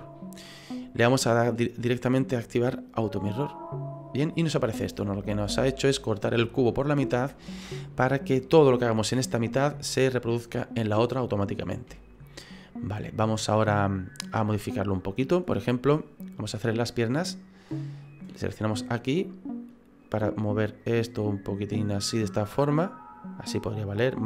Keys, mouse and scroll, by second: 3.0 click, 4.4 middle click, 7.1 shift+middle click, 7.7 middle click, 9.6 middle click, 9.7 shift+middle click, 11.5-11.9 scroll up 2, 11.9 shift+middle click, 12.2 shift+middle click, 12.4 middle click, 18.4 click, 20.0 right click, 20.8 click.